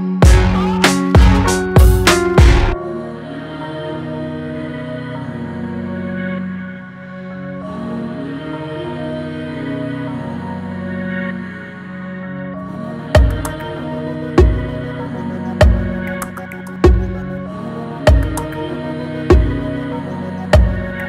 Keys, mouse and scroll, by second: 3.8 scroll up 1, 6.8 click, 7.1 space, 8.1-13.3 drag, 13.3 space, 13.6 click, 13.8 space, 14.5-14.9 scroll up 1, 16.4 click.